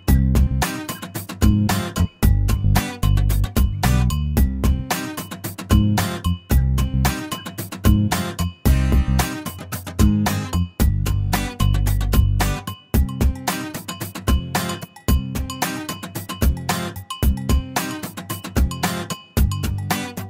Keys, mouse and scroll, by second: 0.5 click, 1.1-1.9 scroll down 3, 1.9-2.6 middle drag, 3.4 e, 4.8 scroll down 2, 5.0-6.1 middle drag, 6.2 scroll up 2, 6.5-8.4 middle drag, 9.3 scroll down 2, 9.5 middle click, 10.1-11.1 scroll up 1, 11.1 middle click, 11.6-12.1 scroll up 1, 12.1-13.3 middle drag, 13.3 scroll up 1, 13.5-14.0 scroll down 1, 14.0 l, 15.3 click, 18.8 click, 20.1 right click.